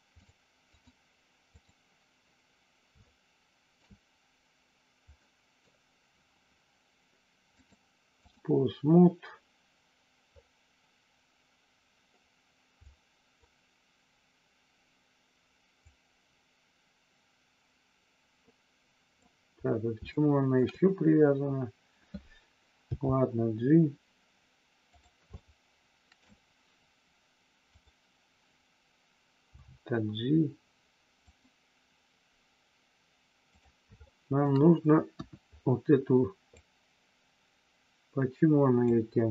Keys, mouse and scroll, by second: 0.6-1.6 drag, 3.0 shift+middle click, 5.2 middle click, 7.6 click, 12.9 click, 15.9-19.2 drag, 20.2 shift+middle click, 20.5 scroll down 1, 22.9 g, 24.9 click, 25.4 shift+middle click, 29.5 g, 31.2 click, 33.5 click, 33.9 shift+middle click, 35.0 KP_1, 36.5-38.9 drag.